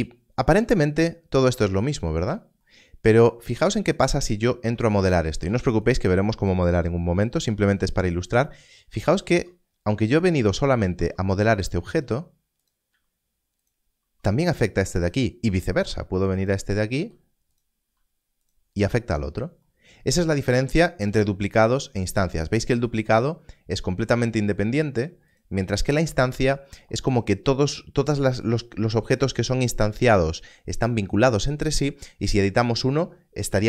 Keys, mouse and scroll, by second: 4.5 Tab, 5.4 3, 9.2 3, 10.9 Tab, 11.5 click, 12.0 e, 12.6 click, 13.5 s, 13.6 click, 14.0 Tab, 15.0 click, 15.7 Tab, 16.4 click, 16.9 e, 17.5 click, 18.0 s, 18.4 click, 19.6 Tab, 21.0 Tab, 25.3 click.